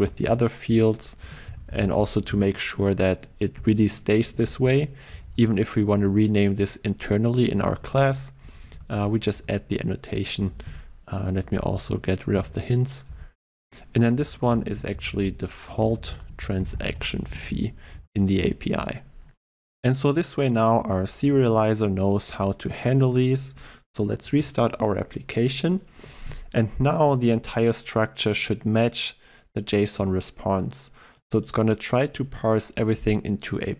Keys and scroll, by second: 2.9 Return, 10.7 alt+Return, 18.0 ctrl+s, 24.3 shift+F10.